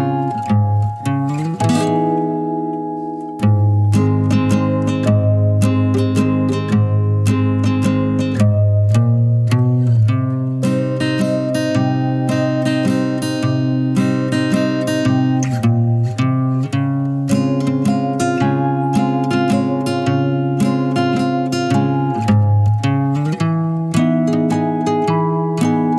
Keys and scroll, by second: 3.8-4.1 typing, 18.7 typing, 22.5-22.8 typing.